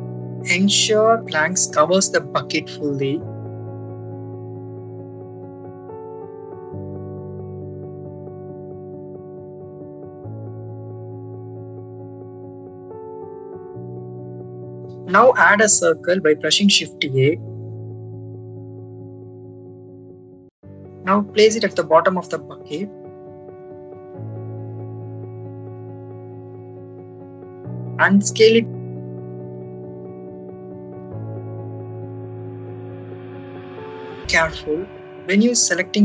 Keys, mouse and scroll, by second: 0.3 ctrl+z, 0.3 a, 0.8 click, 1.2 click, 2.0-3.8 drag, 4.7 click, 5.6 click, 7.4-9.8 drag, 11.3 x, 13.7 click, 14.2-15.6 drag, 16.1 shift+a, 20.0 click, 21.0 click, 22.6 click, 24.0 click, 25.3 click, 28.9 click, 29.6-31.5 drag, 34.6 click.